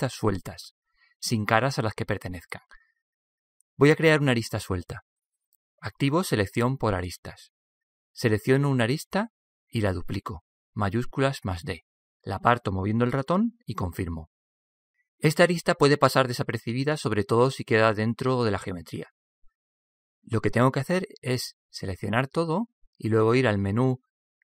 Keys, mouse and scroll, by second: 0.4-2.2 middle drag, 6.7-8.4 drag, 9.1-10.9 right drag, 11.7 shift+d, 15.2-17.2 middle drag, 22.7 a, 23.1 a.